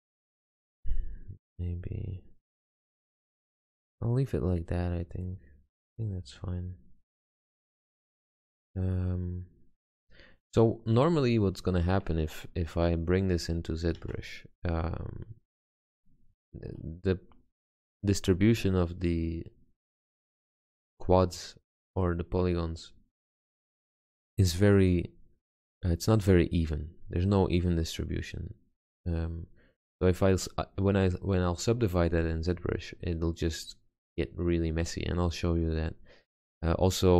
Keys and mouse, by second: 3.9-7.9 middle drag, 11.4-14.1 middle drag, 14.1 Tab, 14.7 z, 16.4 Tab, 26.7-37.1 middle drag.